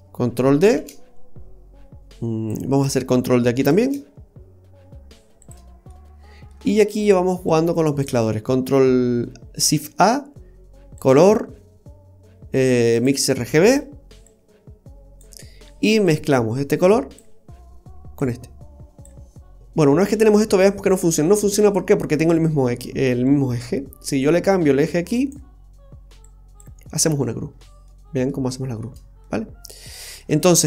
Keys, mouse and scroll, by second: 0.8 shift+d, 2.0 click, 2.8 click, 3.8 shift+d, 5.9 middle click, 7.5 click, 9.7 shift+a, 13.7 typing, 14.3 click, 16.1 click, 18.2 click, 24.2 click, 26.2 click, 27.3-28.3 scroll up 4, 27.9 middle click, 28.4-29.3 scroll down 1, 29.3 middle click, 29.3-30.2 scroll down 5, 30.4-30.6 scroll up 2.